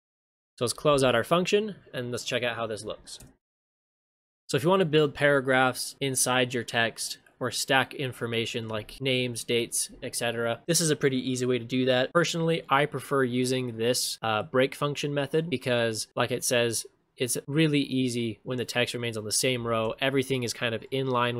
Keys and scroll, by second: 3.2 ctrl+shift+space, 19.7 ctrl+shift+space.